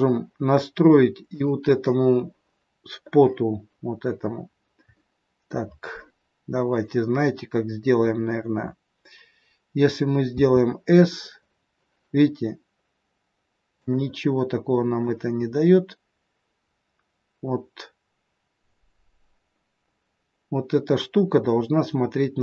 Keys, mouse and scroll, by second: 1.3 click, 2.5 scroll up 1, 2.7-3.1 scroll down 2, 4.3 scroll down 2, 4.9 middle click, 10.3 s, 14.8 click.